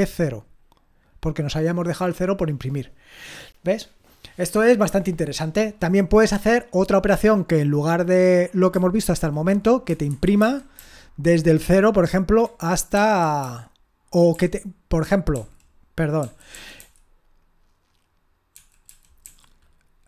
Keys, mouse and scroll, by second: 9.2 ctrl+p, 10.1 alt+b, 10.4 alt+b, 10.8-12.4 alt+b, 12.9 alt+f, 13.4 alt+f, 14.3 alt+f, 15.3-19.2 alt+f.